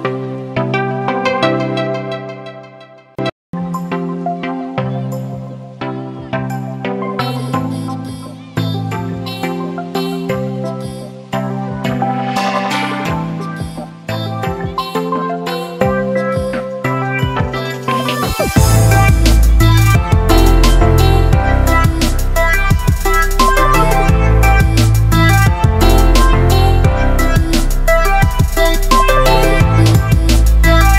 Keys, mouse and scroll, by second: 20.5 click, 21.8 click, 24.6-28.5 drag, 26.1-27.9 drag, 30.7-30.9 drag.